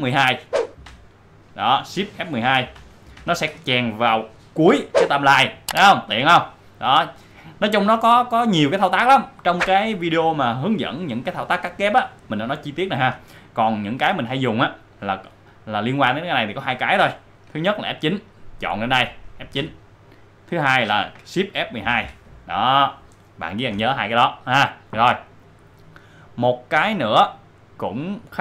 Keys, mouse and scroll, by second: 0.8 shift+F12, 2.7 shift+F12, 7.1-9.0 drag, 9.3-11.9 drag, 14.3-16.3 drag, 18.8 click, 19.5 F9, 21.6 shift+F9, 21.9 shift+F12.